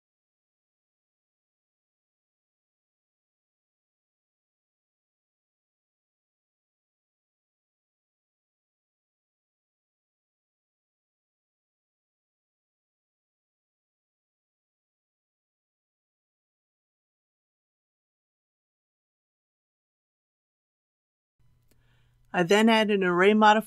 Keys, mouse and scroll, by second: 0.2 middle click, 1.1 shift+click, 1.5 shift+click, 1.9 shift+click, 2.8 shift+click, 3.2 middle click, 4.2 shift+click, 4.6 middle click, 5.9 shift+click, 7.0-9.9 middle drag, 10.2 ctrl+b, 14.1 click, 16.9 Tab, 18.7 KP_3, 22.0 click.